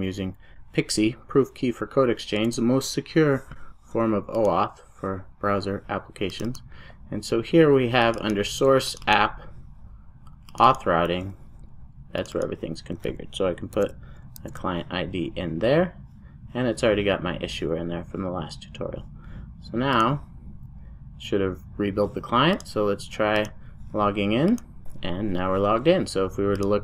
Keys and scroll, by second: 13.8 super+v, 17.8 super+s.